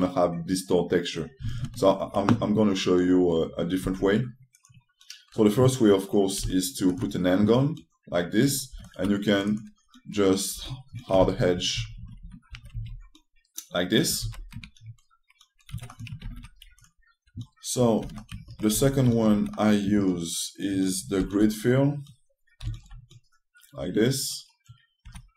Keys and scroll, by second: 4.5 ctrl+space, 7.1 f, 9.4 t, 11.2 5, 11.9 shift+space, 12.4 shift+space, 12.9 a, 16.4 1, 18.7 2, 21.9 g, 23.4 f.